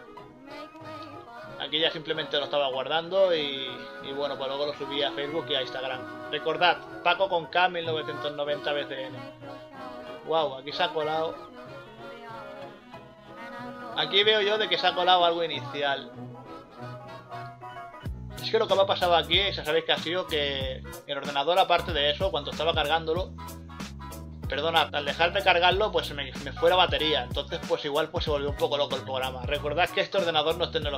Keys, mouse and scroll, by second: 0.6 scroll up 1, 0.8 scroll down 1, 1.4 scroll up 1, 2.0 scroll up 1, 7.3 scroll up 1, 7.9 scroll down 1, 8.2 right click, 9.7 scroll up 1, 10.6 scroll down 1, 10.7 right click, 11.6 right click, 12.5 scroll up 1, 12.7-13.3 scroll down 2, 16.9 scroll up 1, 17.0 scroll down 1, 21.9 scroll up 1, 22.1 scroll down 1, 23.8-24.3 scroll up 2, 24.4 scroll down 1, 27.1 scroll up 1, 27.3 scroll down 1, 29.3 scroll up 1.